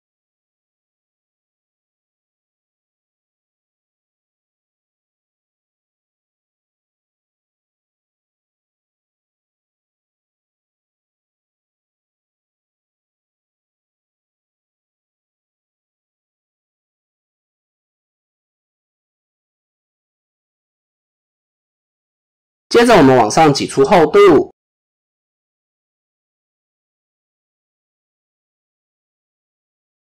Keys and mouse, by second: 0.3 click, 2.2 r, 4.0-5.4 drag, 5.7 Tab, 6.7-8.7 drag, 12.2 ctrl+z, 12.7 Tab, 14.0-15.0 drag, 15.1 Tab, 16.0-17.7 drag, 18.8-19.4 drag, 20.2 x, 21.8 Tab, 22.1 KP_1, 23.0 a, 25.0 e.